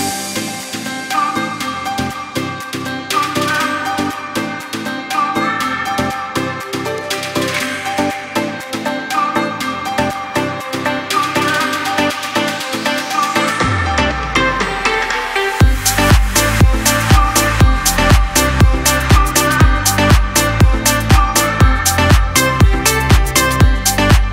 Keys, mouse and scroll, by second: 2.3 shift+click, 3.7-13.8 shift+drag, 14.4 click, 15.4 alt+scroll down 1, 16.0 click, 16.4-16.8 alt+scroll down 1, 16.9 click, 17.3 space, 17.5 click, 17.8 space, 18.5 alt+scroll up 1, 19.3-22.5 typing, 19.5 click, 20.4 click, 20.9 click, 21.8 click, 22.2 click, 23.2 click, 23.7 alt+scroll up 1.